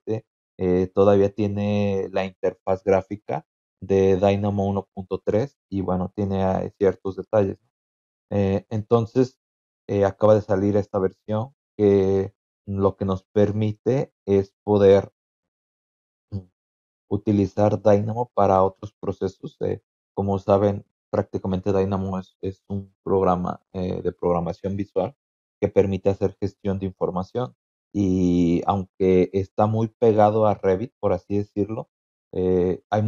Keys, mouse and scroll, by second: 5.8 scroll down 2, 6.4-7.0 scroll down 4, 7.5-8.1 scroll down 4, 8.6-9.5 scroll down 6, 11.4 scroll down 2, 12.4 scroll down 2, 13.0 scroll down 2, 13.7 scroll down 2, 26.9-27.5 scroll down 4.